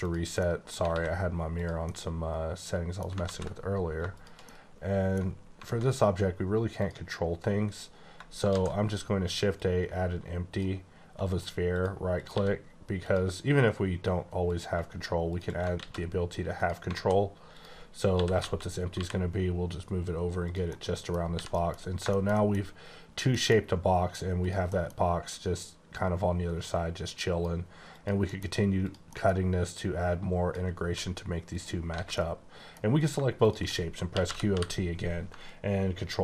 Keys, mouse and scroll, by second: 0.0 click, 0.4 middle click, 0.6 scroll down 1, 0.9 x, 1.6 click, 1.9 middle click, 3.2 ctrl+z, 4.2 click, 4.5 middle click, 5.6 alt+a, 6.7 click, 8.4 shift+a, 9.5 click, 11.2 right click, 11.7 click, 12.2 click, 12.2 g, 13.0 click, 14.4 click, 15.7 alt+x, 16.6 click, 16.9 alt+a, 17.5 click, 18.1-18.9 typing, 20.4 click, 20.6 middle click, 21.2 scroll down 2, 21.3 h, 21.5 middle click, 21.8-22.1 scroll up 2, 22.1 shift+middle click, 22.3 double middle click, 23.3 middle click, 24.3 click, 24.7 middle click, 24.9-25.3 scroll up 2, 25.9 click, 27.9 click, 28.3 middle click, 28.8 click, 29.1 middle click, 30.9 w, 31.5 click, 31.8 click, 31.9 alt+a, 32.2 middle click, 32.9 click, 33.4 click, 34.1-34.4 typing, 35.7-36.0 ctrl+scroll down 2.